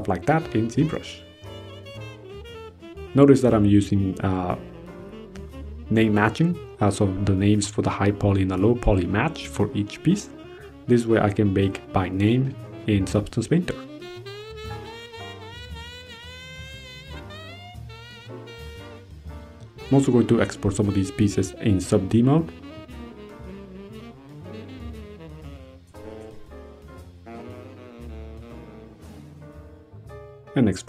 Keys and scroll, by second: 0.8 ctrl+v, 0.9 ctrl+Return, 1.5 ctrl+c, 2.4 ctrl+v, 4.9 ctrl+1, 6.8 ctrl+a, 7.3 ctrl+1, 8.0 ctrl+z, 9.1 ctrl+1, 10.9 ctrl+1, 11.7 ctrl+1, 12.2 ctrl+1, 13.0 ctrl+1, 13.8 ctrl+1, 14.6 ctrl+1, 15.1 ctrl+1, 17.2 ctrl+c, 17.7 ctrl+v, 18.3 ctrl+h, 19.6 ctrl+d, 19.7 ctrl+1, 20.6 ctrl+BackSpace, 21.0 ctrl+1, 22.8 ctrl+d, 25.1 ctrl+c.